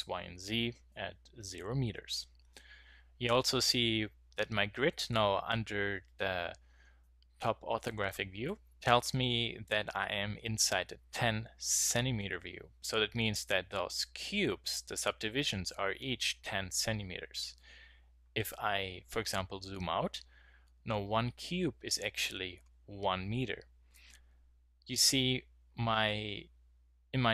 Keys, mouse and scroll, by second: 17.3-27.3 middle drag.